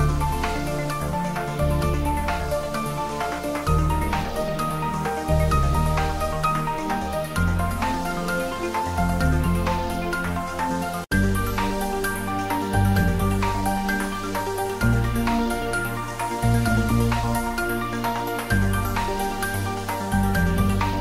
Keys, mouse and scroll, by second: 0.0-2.7 typing, 0.6 click, 1.5 click, 2.2 click, 5.1 click, 5.3 ctrl+s, 5.7 click, 6.0 ctrl+s, 8.5 click, 11.6 shift+right click, 12.1 click, 12.5 g, 12.9 y, 13.7 click, 14.8 ctrl+s, 15.2 click, 16.6-18.5 typing, 17.4 click, 18.7 click, 19.1 ctrl+s, 20.4 click.